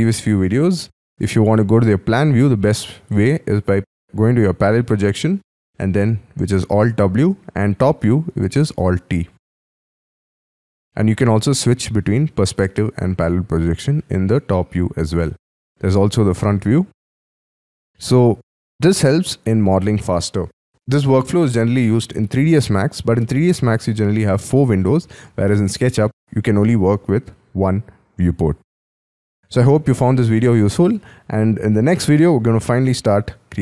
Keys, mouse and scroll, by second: 4.7 alt+w, 8.3 alt+t, 9.2-10.0 scroll down 6, 10.0-10.4 scroll up 4, 10.4-11.2 scroll down 3, 11.5 alt+w, 12.6 alt+w, 13.3-14.5 scroll down 5, 14.7 alt+t, 15.4 alt+f, 16.6-17.2 scroll up 3, 17.2 middle click, 17.9 middle click, 18.5-20.2 scroll down 5.